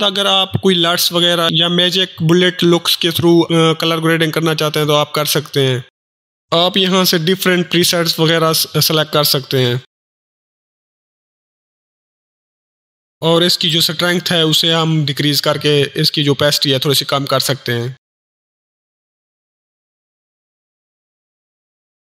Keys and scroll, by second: 0.1 ctrl+o, 0.3 ctrl+s, 0.6 ctrl+Return, 14.4-15.3 typing, 17.2-18.0 typing.